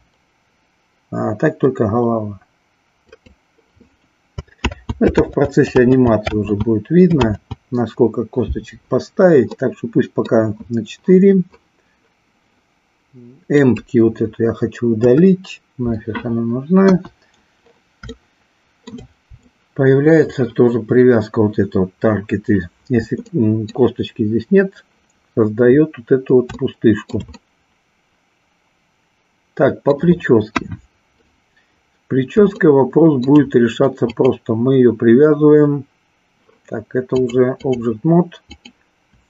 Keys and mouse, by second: 4.6 ctrl+z, 5.3 ctrl+z, 6.3 ctrl+z, 9.6 middle click, 13.7 click, 14.9 Delete, 16.9 KP_1, 18.2-19.0 shift+middle drag, 23.3-23.8 middle drag, 26.6-27.2 shift+middle drag, 27.4-29.9 middle drag, 30.4 KP_1, 32.6 shift+middle click, 34.1 click, 37.2 click, 38.4 click.